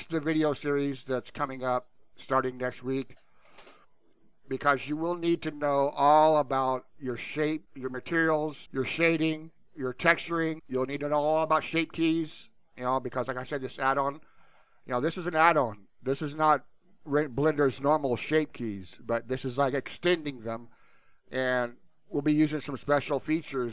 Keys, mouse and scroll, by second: 14.7 click, 17.5 click, 20.7 click, 22.3 click.